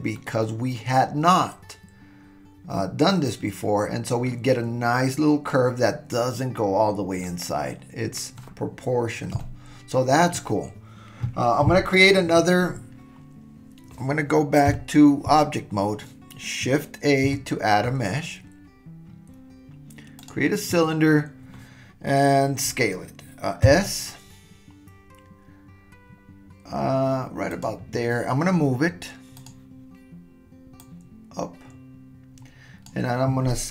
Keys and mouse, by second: 0.1-4.3 middle drag, 7.2-8.9 middle drag, 9.4-9.8 middle drag, 9.8 click, 14.7 Tab, 17.2 shift+a, 23.6 s, 29.5 click, 30.8-32.9 drag.